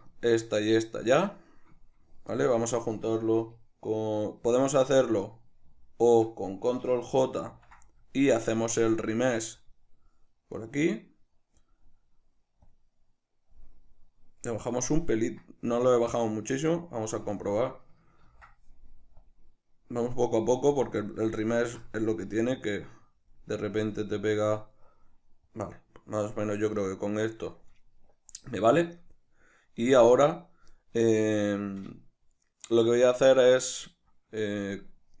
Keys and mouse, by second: 0.1-9.5 shift+middle drag, 7.5 ctrl+j, 9.5 click, 10.5-12.7 middle drag, 12.7-24.5 drag, 18.3 ctrl+z, 21.6 ctrl+z, 24.9-35.2 middle drag.